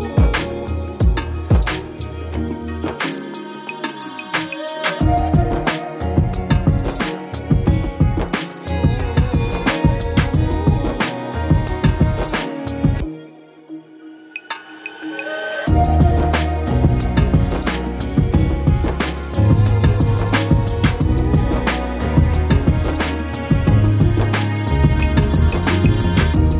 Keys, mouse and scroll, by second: 0.0 z, 0.5 g, 2.3-3.6 scroll up 15, 2.4 shift+middle click, 2.8 shift+middle click, 3.0 shift+middle click, 3.6 g, 4.8 g, 5.4 scroll down 7, 5.7 shift+middle click, 6.2 click, 6.8 scroll down 8, 7.0-7.4 shift+middle drag, 7.4-7.7 shift+drag, 7.9 shift+middle click, 8.3 shift+click, 8.8 shift+click, 9.0-9.3 scroll down 10, 9.3-9.7 shift+middle drag, 9.7 KP_1, 9.9 scroll up 5, 10.2 click, 10.6 ctrl+l, 11.9-13.2 scroll up 6, 12.0 shift+middle click, 12.4 shift+middle click, 13.2 a, 13.5-14.0 scroll down 12, 14.0 ctrl+z, 14.6 shift+middle click, 15.0 shift+click, 15.4 shift+middle click, 16.0 shift+middle click, 16.2 shift+click, 16.3 scroll up 7, 16.6 scroll down 1, 16.8 shift+middle click, 17.0 shift+click, 17.3 shift+middle click, 17.7 shift+middle click, 17.9 shift+click, 18.0 scroll down 2, 18.4 shift+click, 19.0 shift+middle click, 19.2 shift+click, 19.9-20.2 shift+middle drag, 20.2 shift+click, 20.5 shift+click, 20.7 shift+click, 21.5 shift+click, 21.7 shift+middle click, 21.9 shift+click, 22.4 shift+click, 22.8 shift+middle click, 23.6 shift+click, 24.1 shift+click, 24.2 shift+middle click, 24.8 shift+click, 25.3 shift+click, 25.9 shift+middle click, 26.1 shift+click.